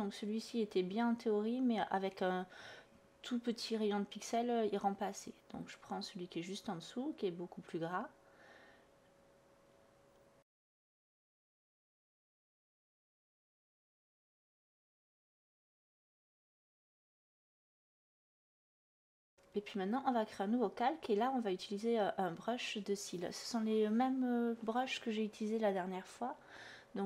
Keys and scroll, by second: 3.9 ctrl+z, 5.0 /, 19.8-20.8 typing.